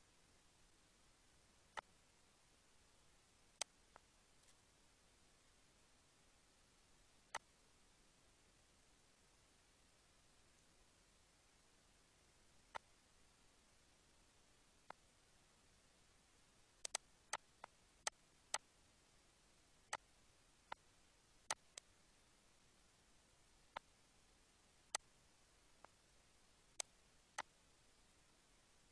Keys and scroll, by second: 4.3 ctrl+s, 5.3 -.